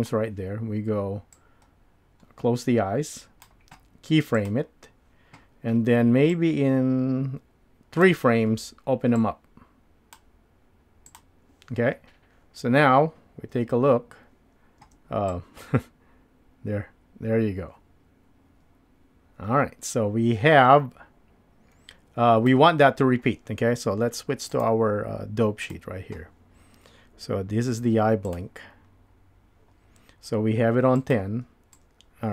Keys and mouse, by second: 1.5-3.4 drag, 4.4 click, 11.1 click, 13.6 space, 15.1 space, 15.3-32.3 drag.